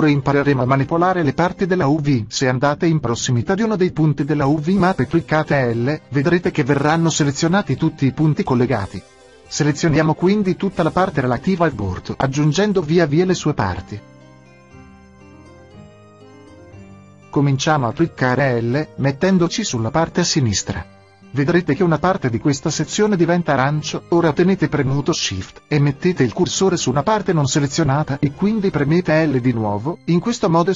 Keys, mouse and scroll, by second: 0.0-2.8 drag, 2.7-6.3 middle drag, 20.7 l, 29.3 shift+l.